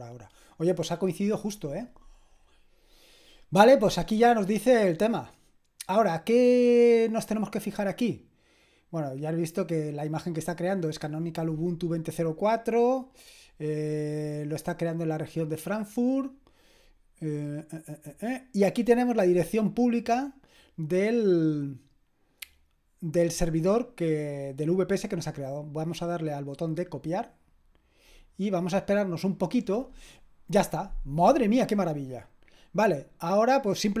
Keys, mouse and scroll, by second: 25.8 click, 31.7 click.